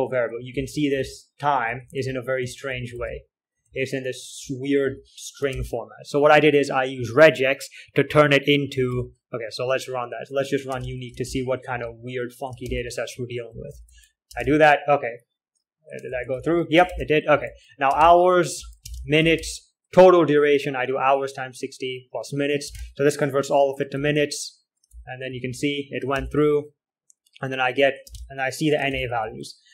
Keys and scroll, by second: 0.0-4.1 typing, 5.2-5.9 typing, 5.9 ctrl+h, 8.3-9.7 typing, 11.2 space, 11.2 d, 11.6 ctrl+l, 12.0 z, 12.1 z, 12.9 ctrl+h, 13.2-15.2 typing, 16.4 ctrl+l, 16.8-20.0 typing, 17.2 ctrl+h, 23.2 space, 24.5 j, 25.6 typing, 26.4 ctrl+h, 28.6-29.7 typing.